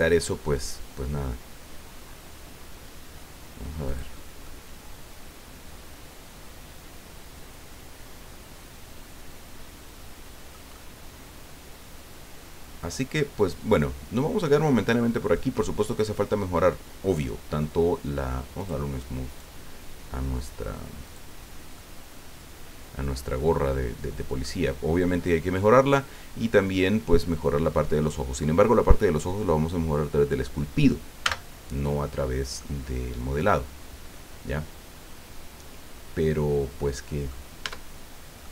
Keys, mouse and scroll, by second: 2.4-2.8 scroll down 2, 3.9 click, 4.4-10.7 middle drag, 18.6 click, 19.3 right click, 21.0 click, 21.7-24.6 middle drag, 31.2 n, 32.2 scroll down 2, 32.6-37.5 middle drag, 37.6 Tab, 38.4 middle click.